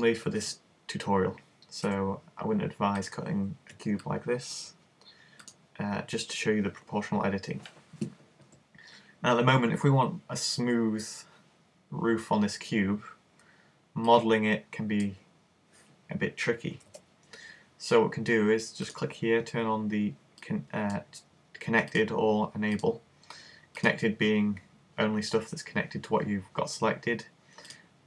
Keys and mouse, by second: 1.9 s, 3.1 click, 5.5-7.2 right drag, 14.1 click, 16.9 super+z, 18.9 click, 22.0 click, 24.4 click, 27.7 click.